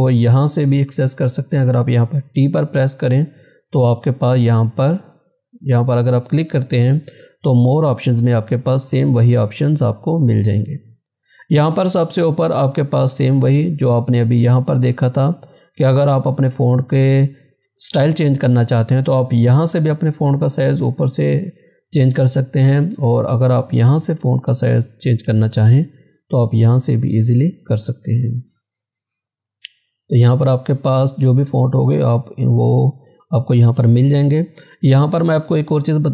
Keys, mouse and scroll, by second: 4.4 click, 8.6 click, 8.7-9.1 scroll down 1, 9.7-11.6 scroll up 1, 24.2 click, 27.3 click, 27.4 click, 28.9-33.8 scroll down 1.